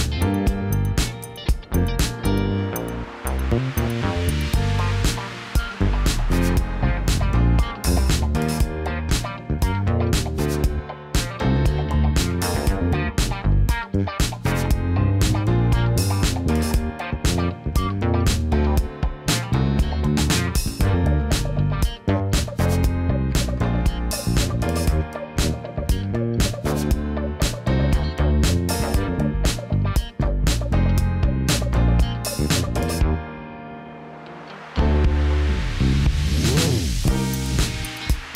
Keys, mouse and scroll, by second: 1.0-2.3 drag, 8.1-10.6 drag, 11.8-13.1 drag, 14.4 click, 18.3 KP_1, 21.0 click, 21.5 Tab, 24.3 click, 26.2 shift+click, 27.1 click, 29.0 click, 29.6 click, 32.0 click, 37.8 KP_1.